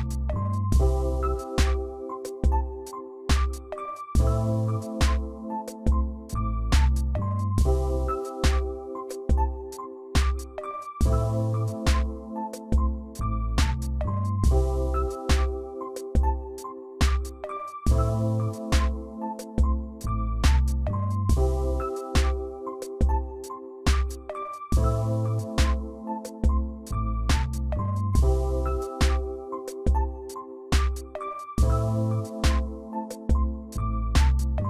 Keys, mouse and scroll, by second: 1.4 ctrl+t, 2.0 ctrl+t, 2.2 shift+click, 7.7 ctrl+a, 9.6 ctrl+a, 9.7 ctrl+d, 10.9 right click, 13.9 ctrl+t, 14.3 ctrl+right click, 24.0 right click.